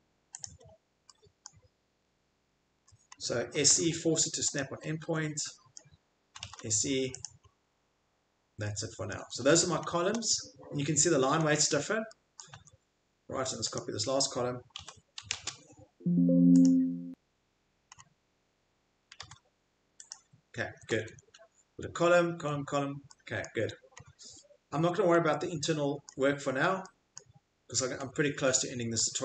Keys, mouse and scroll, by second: 0.4 click, 0.4 click, 0.6 click, 1.5 middle click, 1.9 middle click, 2.0 middle click, 2.8-3.5 scroll, 3.3-4.2 typing, 4.5 click, 4.8-5.3 scroll, 5.7 scroll, 6.3-7.3 typing, 7.3 click, 7.4 middle click, 7.5 middle click, 7.5 middle click, 7.7 middle click, 8.3 middle click, 8.4 middle click, 9.1 middle click, 9.1-9.9 typing, 10.1 Escape, 12.5 Escape, 15.3-16.1 typing, 16.6 click, 17.9 middle click, 18.5 middle click, 18.8-19.6 typing, 20.1 click, 20.6 middle click, 20.6 middle click, 20.7 middle click, 20.7 Escape, 20.9 Escape, 21.1 Escape, 22.3 Escape, 23.6 Escape, 25.1 click, 25.2 click, 26.4 click, 26.4 click, 26.5 Escape, 28.0 click, 28.1 click, 28.5 click.